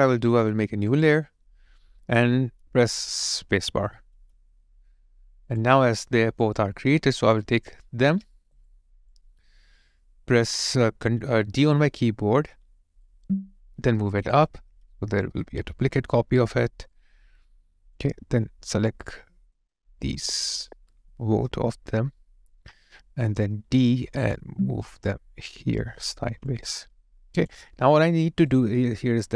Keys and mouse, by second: 4.2 space, 7.4 shift+click, 8.3 alt+right click, 8.7 alt+click, 12.7 d, 15.0 alt+right click, 15.4 alt+middle click, 15.8 alt+click, 18.5 alt+click, 20.0 shift+click, 23.7 d, 26.5 alt+click, 28.1 alt+right click.